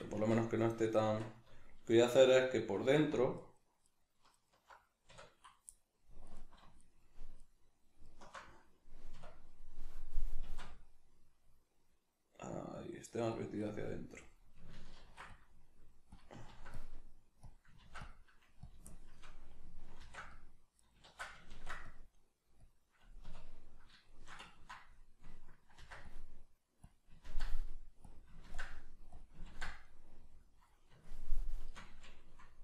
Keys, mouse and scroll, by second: 0.2 Tab, 1.1 Tab, 2.3 alt+right click, 3.4 alt+right click, 3.8 alt+right click, 4.4 alt+right click, 5.1 \, 5.8 middle click, 6.3 alt+right click, 6.8 alt+shift+right click, 7.4 alt+shift+right click, 8.1 alt+shift+right click, 9.2 \, 10.4 alt+s, 13.4 click, 13.6-16.2 middle drag, 15.0 ctrl+r, 16.2 click, 16.5 ctrl+r, 17.6 click, 17.8 ctrl+r, 18.7 click, 18.9-20.9 shift+middle drag, 20.0 ctrl+r, 20.9 right click, 21.1 ctrl+z, 21.5 ctrl+r, 22.6 click, 23.2 \, 23.6-25.8 middle drag, 25.8 ctrl+r, 27.0 click, 27.3 ctrl+r, 28.1 click, 28.4 ctrl+r, 29.2 click, 29.5 ctrl+r, 30.4 click, 30.7-32.6 middle drag.